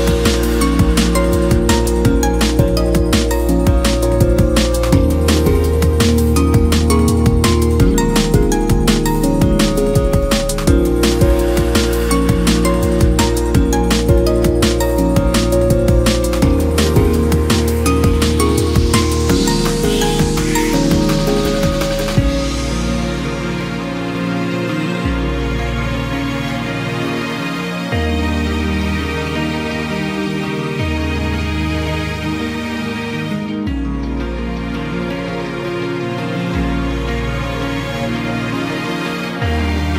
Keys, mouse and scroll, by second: 0.2-0.7 scroll up 3, 0.7 ctrl+b, 2.8 KP_1, 3.5-3.9 scroll up 1, 3.9 middle click, 4.2 click, 4.6 x, 5.8 ctrl+z, 6.3 x, 7.9 3, 8.1 click, 8.6 KP_Add, 8.8 KP_Add, 8.9 KP_Add, 10.3 KP_1, 11.2 click, 11.4 scroll up 2, 11.6-12.2 scroll down 1, 12.2 s, 14.9 g, 16.1 Tab, 16.6-17.2 middle drag, 17.2 scroll down 3, 17.3-17.8 middle drag, 17.8 scroll down 1, 18.1 KP_1, 18.5 shift+middle drag, 18.7-19.3 scroll up 3, 19.3 click, 19.5 scroll down 2, 19.6 middle click, 19.9-20.3 right drag, 20.3-21.8 middle drag, 21.8 KP_1, 22.9 shift+middle drag, 23.1 scroll up 1, 23.5 click, 23.7 scroll down 1, 23.8-24.8 middle drag, 24.8 KP_1, 25.7-28.9 drag, 28.9-29.6 scroll down 5, 29.3 Tab, 29.6 s, 29.9-30.8 scroll up 6, 30.2 s, 30.8 s, 31.3 g, 32.5-33.1 scroll up 2, 33.1-33.7 scroll down 1, 33.7 s, 35.9 middle click, 36.3 Tab, 36.5 click, 36.9 KP_1, 37.1 Tab, 37.6 g, 38.6 Tab, 38.8 click, 39.1 Tab, 39.8 KP_Divide.